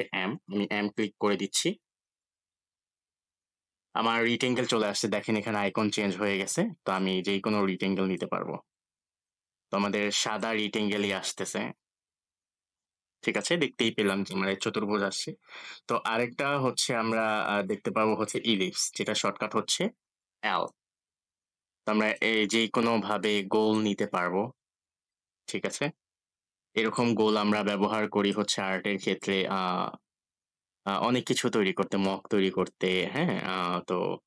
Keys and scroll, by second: 0.0 m, 19.2 l.